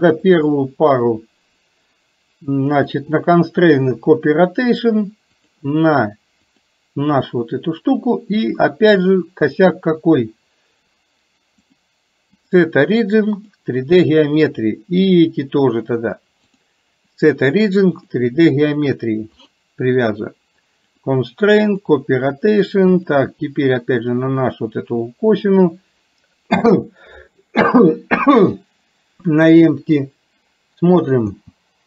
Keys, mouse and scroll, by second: 2.8-4.0 drag, 5.4 click, 9.7 click, 11.8-13.7 drag, 14.6 click, 16.4-18.2 drag, 19.4 click, 20.9 click, 23.1 click, 31.3 space.